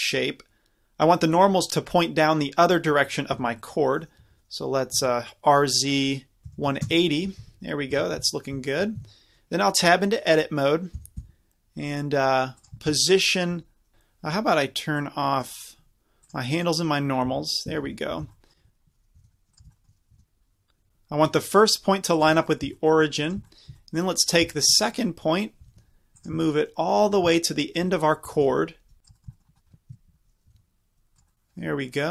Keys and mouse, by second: 3.3 Tab, 4.2 r, 7.4 Tab, 8.0 Tab, 8.4-8.8 middle drag, 9.0 Tab, 11.0 g, 13.0 middle click, 15.0-17.3 middle drag, 17.3-18.3 drag, 17.3 z, 17.7 a, 17.9 a, 18.1 z, 18.5 middle click, 19.2 g, 19.6 z, 20.7 g, 22.2 click, 22.6 click, 23.7 middle click, 23.9 click, 24.5 middle click, 24.8 click, 24.8-26.3 middle drag, 25.6 g, 26.5 click, 26.7 click, 27.1-29.0 drag, 28.3 g, 29.2 click, 29.4 click, 29.9 KP_Decimal, 30.6 g, 31.2 click.